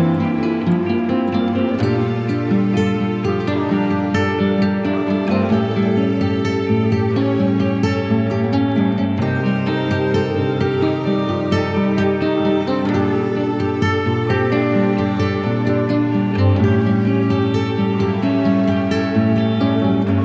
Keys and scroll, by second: 0.3 space, 2.1 [, 3.4 shift+[, 5.9 x, 6.6 x, 7.0 z, 7.5 v.